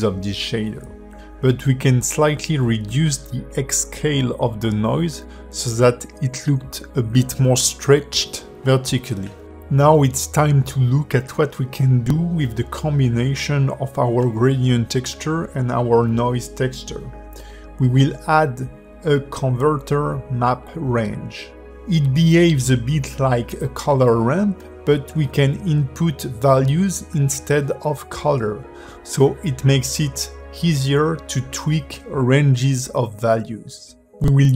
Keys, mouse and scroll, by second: 3.4 click, 5.4 ctrl+h, 5.9 scroll down 4, 6.4 shift+middle click, 7.2 click, 7.6 g, 8.8 scroll down 2, 9.2 shift+middle click, 11.5 click, 11.8 g, 12.9 click, 13.2 g, 14.3-14.8 scroll up 4, 14.8 click, 15.5 g, 17.8 shift+a, 26.4 click, 27.1 click, 31.8 click, 33.9 ctrl+shift+click.